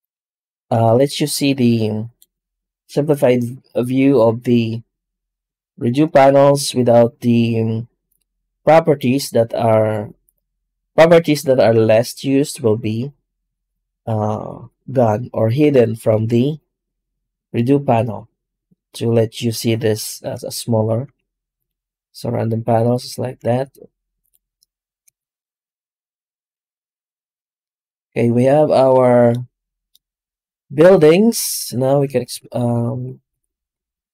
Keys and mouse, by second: 20.9 shift+q, 23.4 shift+q, 31.3 right click, 31.8 Tab, 32.3 alt+shift+z, 32.8 a, 33.2 s.